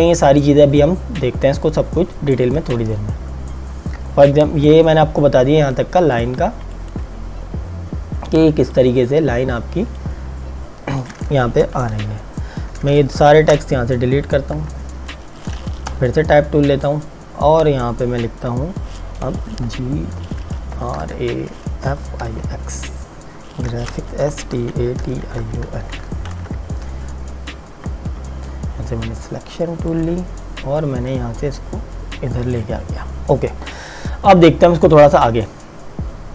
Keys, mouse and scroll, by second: 6.2 click, 11.8 Delete, 13.2 click, 13.4 Delete, 14.4 click, 14.6 Delete, 16.0 t, 16.9 click, 19.6-26.2 typing, 26.4 KP_Enter, 30.0 click.